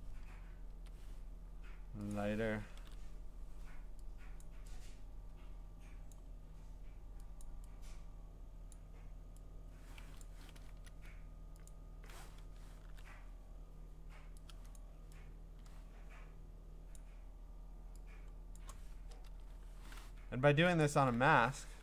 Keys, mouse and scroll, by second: 0.7 Return, 2.1 click, 2.8 ctrl+u, 4.4 click, 6.1 click, 10.6 Return, 11.7 click, 12.8 ctrl+u, 14.8 click, 16.9 click, 18.6 click, 19.3 Return, 20.8 click.